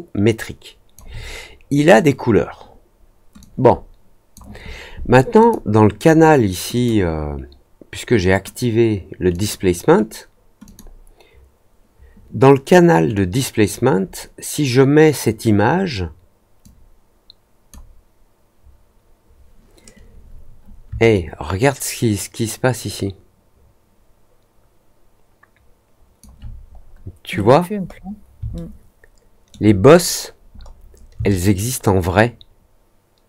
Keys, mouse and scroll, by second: 3.3 click, 5.3 click, 6.7 click, 9.3 click, 10.6 click, 13.1 click, 16.5-17.6 drag, 21.1-26.1 alt+drag, 26.7 scroll up 2, 27.3-28.0 scroll up 4, 28.5-29.4 alt+middle drag, 29.8-30.3 scroll up 4, 30.5 middle click, 31.2-33.2 alt+drag.